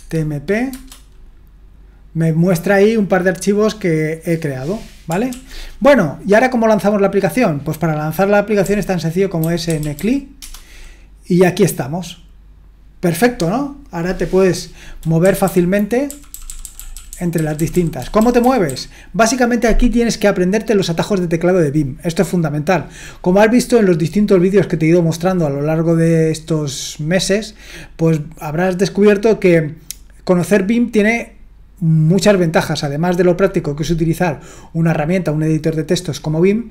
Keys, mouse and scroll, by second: 0.7 Return, 5.3 ctrl+l, 8.6-10.4 typing, 15.2 Down, 15.4 Down, 16.0-18.7 typing.